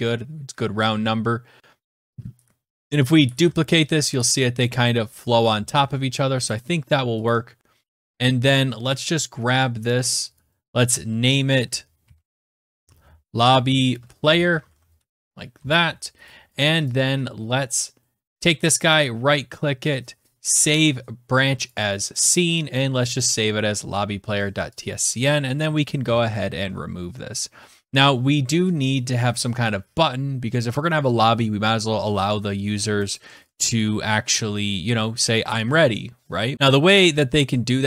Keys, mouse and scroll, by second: 2.8 click, 3.1 ctrl+d, 5.5 ctrl+z, 6.2 click, 7.0 click, 7.7-8.2 scroll down 4, 9.2 right click, 9.9 click, 9.9 scroll, 10.1 click, 11.5-14.9 typing, 16.0 right click, 16.6 click, 18.1 BackSpace, 18.2 right click, 21.4 click, 22.8 click, 24.5 click, 24.8 click, 25.4 Delete, 25.7 Return, 33.1 click, 35.6-36.0 scroll, 36.5 scroll, 36.5 click, 37.2-37.8 scroll.